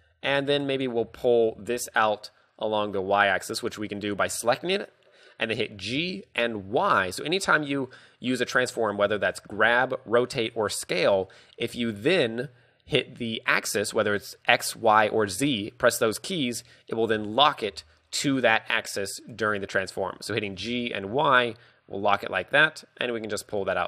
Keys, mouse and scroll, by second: 0.0-1.7 typing, 6.1 g, 7.4 right click, 7.7 scroll down 4, 8.0 middle click, 8.4-9.3 scroll up 4, 9.3 shift+middle click, 9.6 g, 10.6 right click, 12.0 g, 19.5 right click, 19.8 KP_3, 20.7 g, 23.5 click, 23.6 Tab.